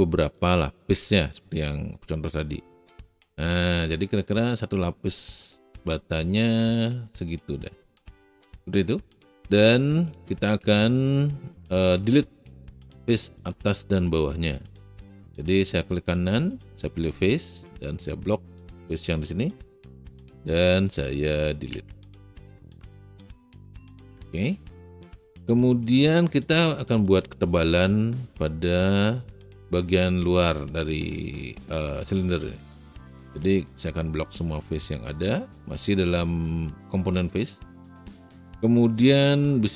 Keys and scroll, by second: 0.4 r, 21.7 Delete.